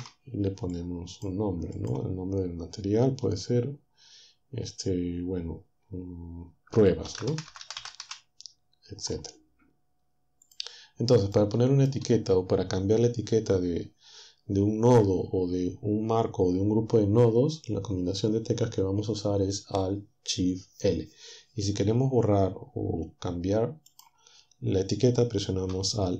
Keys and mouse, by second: 2.0-6.7 drag, 7.1-8.0 typing, 10.5 click, 11.3 click, 23.9-25.7 drag.